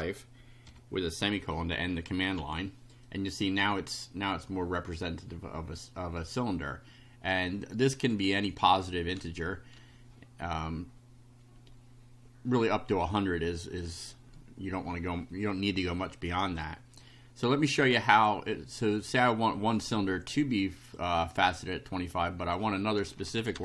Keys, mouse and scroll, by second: 0.0-0.7 typing, 2.3 F5, 3.0 click, 7.5 click, 13.6 click, 18.1 click, 19.1 click, 20.1-21.1 drag, 22.4 click, 23.2 Home, 23.5 Return.